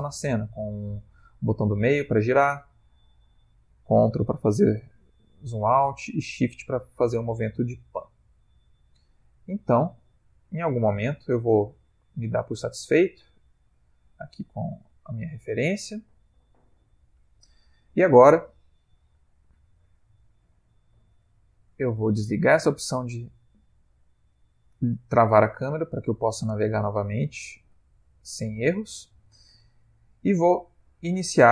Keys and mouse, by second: 1.4 middle click, 3.9 ctrl+middle click, 5.8 shift+middle click, 7.0 shift+middle click, 7.2 middle click, 9.1 shift+middle click, 10.2 middle click, 11.0 shift+middle click, 12.1 middle click, 13.0 ctrl+middle click, 14.0 ctrl+middle click, 15.0 middle click, 16.1 shift+middle click, 22.6 click, 26.2 ctrl+middle click, 26.9 shift+middle click, 27.5 ctrl+middle click, 27.8 shift+middle click, 28.4 ctrl+middle click, 28.9 shift+middle click.